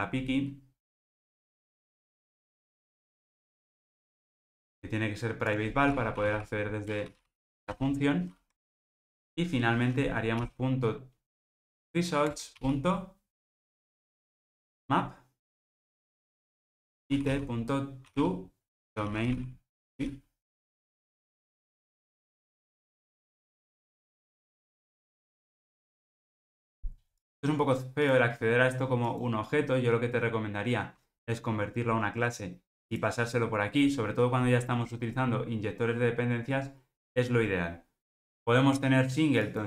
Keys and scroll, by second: 6.9 Return, 12.4 Return, 23.5 alt+super+l, 26.4 super+z.